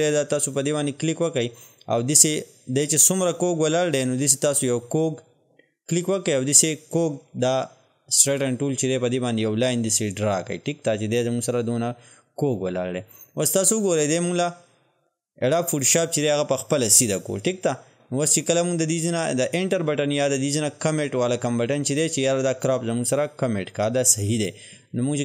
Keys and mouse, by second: 0.6 click, 3.9-13.9 drag.